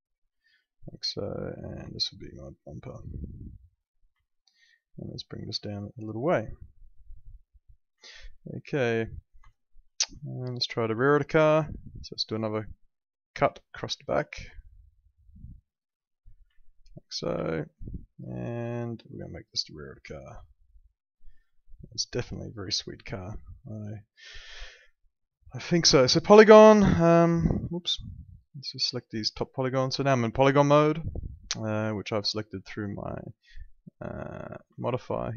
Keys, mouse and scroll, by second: 1.4 click, 1.9 alt+middle click, 3.2 click, 4.2 alt+middle click, 4.9 click, 8.0 alt+middle click, 9.5 alt+middle click, 10.2 alt+middle click, 11.0 alt+middle click, 13.2 click, 16.2 right click, 16.6 alt+middle click, 17.3 w, 17.8 click, 18.3 alt+middle click, 19.1 click, 20.4 alt+middle click, 22.7 alt+middle click, 25.3 click, 26.3 alt+middle click, 26.9 click, 27.6 ctrl+z, 28.0 ctrl+click, 30.4 r, 33.6 click, 34.8 alt+middle click.